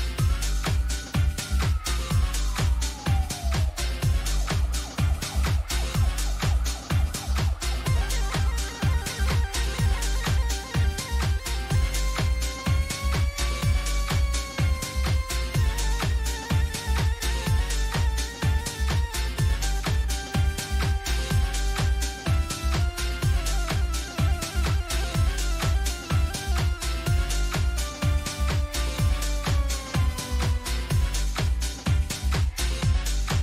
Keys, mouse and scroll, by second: 0.3 click, 1.5 click, 10.4 click, 11.5-12.4 typing, 17.0 click, 22.9 click.